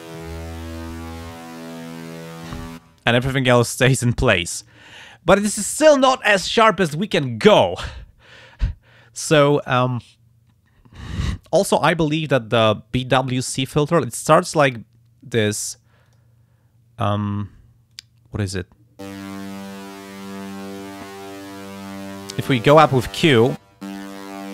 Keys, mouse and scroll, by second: 0.0-2.4 drag, 16.1 click, 17.9 click, 22.1-24.5 drag.